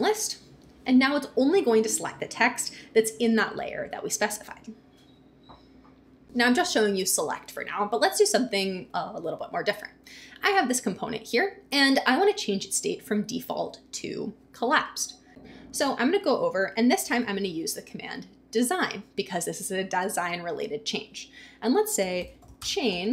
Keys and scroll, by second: 16.8-17.9 typing, 18.5 Return, 21.7-23.1 typing.